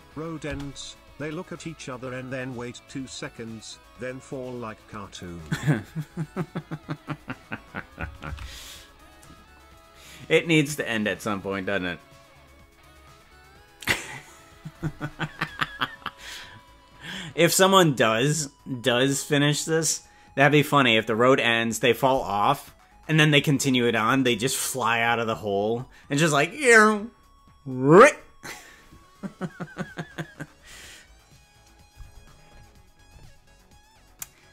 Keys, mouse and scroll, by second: 0.6 space, 10.2 ctrl+s, 15.8 typing.